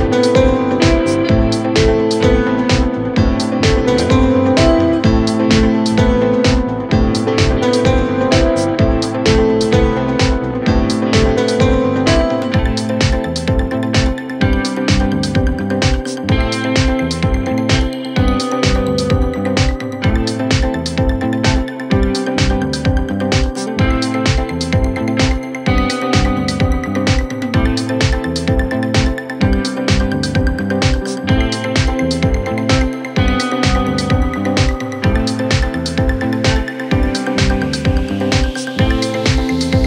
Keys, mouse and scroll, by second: 0.1 click, 1.5 scroll down 1, 1.8 scroll up 3, 1.9-2.7 middle drag, 2.8 click, 3.6-4.2 scroll up 3, 3.9 middle click, 4.2 drag, 4.3 scroll down 3, 4.4 middle drag, 4.6-5.0 drag, 5.0 KP_1, 5.9 scroll up 1, 6.0-7.0 scroll down 1, 7.8 scroll up 1, 7.9-8.6 scroll down 1, 8.6 Tab, 11.6 scroll up 2, 11.7 middle click, 12.1 Tab, 12.4 middle click, 12.5 scroll up 1, 12.6 click, 12.7 scroll down 2, 12.8 middle drag, 14.2 shift+a, 16.0 scroll up 1, 16.2 KP_1, 16.5 scroll down 1, 16.6 middle click, 16.9 KP_1, 17.4 KP_3, 18.0 r, 18.8 click, 19.7 s, 20.5 s, 21.9 middle drag, 22.1 scroll up 2, 22.2 middle click, 22.4-23.0 scroll down 2, 23.0 s, 24.0 scroll up 1, 24.2 s, 25.4 drag, 25.5-26.5 middle drag, 27.0-27.7 scroll down 2, 27.7-28.1 middle drag, 28.1 click, 28.3-28.8 right drag, 28.8 middle drag, 29.0-30.5 drag, 30.5-32.0 right drag, 32.0 q, 33.5-34.5 middle drag, 35.7 middle click, 35.9 click, 36.8 Tab, 37.2 Tab, 38.3 click.